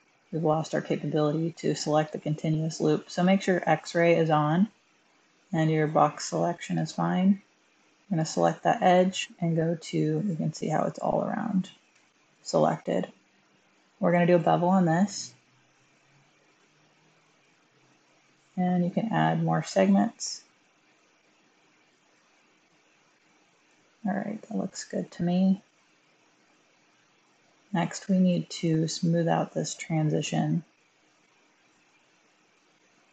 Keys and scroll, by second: 11.8 1, 31.7 typing.